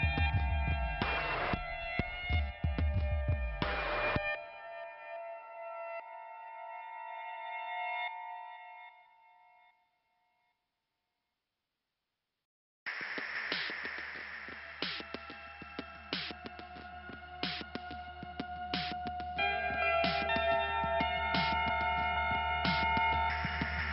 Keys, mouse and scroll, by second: 0.7 click, 1.2 click, 6.3 click, 6.5 click, 7.0 click, 7.5 middle click, 8.6 click, 9.2 middle click, 10.1 click, 11.6 click, 13.4 click, 14.7 click, 16.0 click, 16.1 click, 16.7 click, 16.9 click, 17.0 click, 17.1 click, 18.4 click, 18.5 click, 19.4 scroll up 2, 21.6 click, 21.9 click.